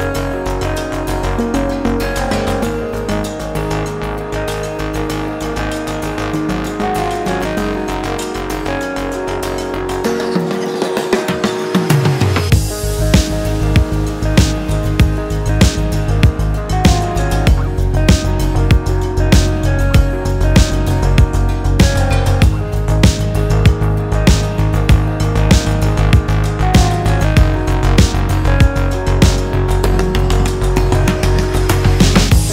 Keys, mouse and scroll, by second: 6.2 click, 7.0-8.8 drag, 9.2-9.9 drag, 10.7 BackSpace, 11.5 BackSpace, 12.6 click, 13.8-19.6 drag, 20.4 BackSpace, 21.6-22.6 drag, 23.3 BackSpace, 24.8-30.5 drag, 31.3-32.5 drag.